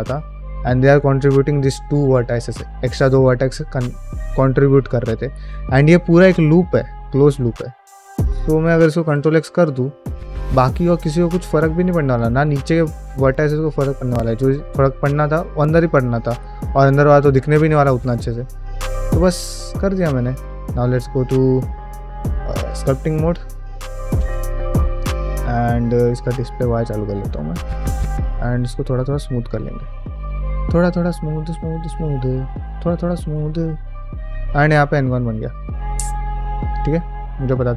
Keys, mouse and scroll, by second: 14.6-17.2 middle drag, 14.6-15.0 scroll down 1, 17.2-17.5 scroll down 1, 17.6-19.8 middle drag, 24.1 ctrl+alt+space, 24.9 shift+middle click, 25.3 ctrl+middle click, 25.8 q, 27.0 middle click, 27.3 f.